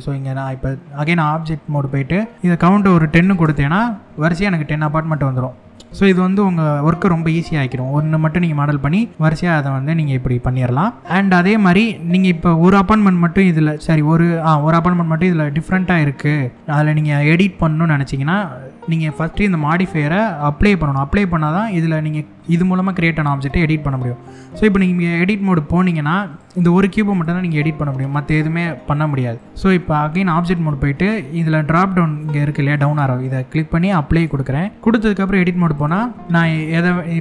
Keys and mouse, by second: 0.0 middle click, 2.3-3.6 drag, 4.2 shift+middle click, 5.3 middle click, 6.4-6.7 middle drag, 9.5-10.4 shift+middle drag, 25.1 Tab, 25.9 click, 29.0 click, 29.4 Tab, 32.4-33.9 drag, 34.7 Tab, 35.3 click, 36.1 click.